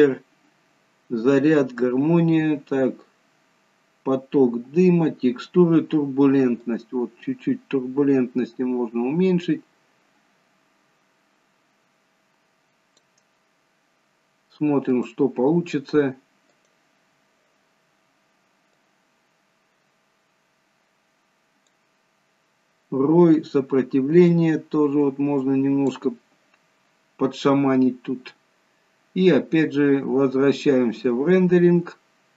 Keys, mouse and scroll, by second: 1.8-3.7 scroll down 1, 3.7-4.6 scroll down 1, 4.6-7.0 scroll down 1, 7.0 click, 15.3 click, 16.8 click, 18.9 click, 24.5 click, 28.4-29.3 scroll down 1, 29.6 scroll up 4, 30.4 scroll up 3, 31.3-32.3 scroll up 1.